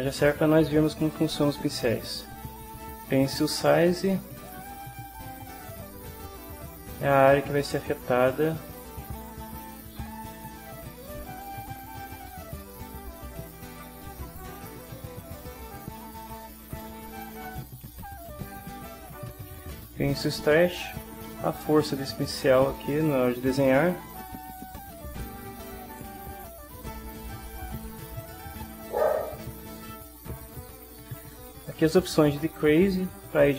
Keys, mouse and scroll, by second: 3.7 click, 5.8-7.9 right drag, 8.9 click, 9.7 right click, 11.3 right click, 13.5-14.7 drag, 17.4-18.5 drag, 20.6-22.6 drag, 23.1-24.3 right drag, 24.5-26.1 right drag, 28.2-29.9 drag, 32.5 click, 33.3-33.5 right drag.